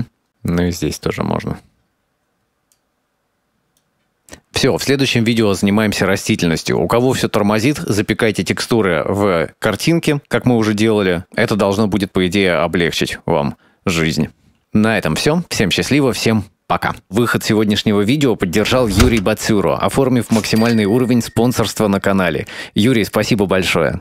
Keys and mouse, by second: 0.4 click, 1.3-2.5 drag, 3.6 click, 4.2 ctrl+s.